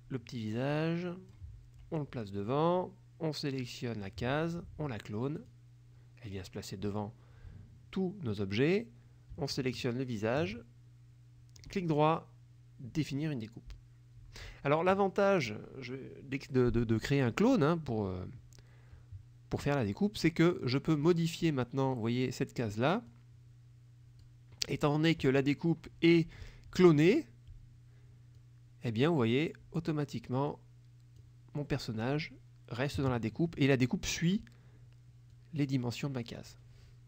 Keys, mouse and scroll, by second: 2.5 click, 3.6 click, 5.4 click, 7.0 click, 9.5 shift+click, 11.6 right click, 13.1 click, 21.0 click, 22.0 click, 23.2-24.5 drag, 28.5 click, 30.6 click, 35.4-36.8 drag.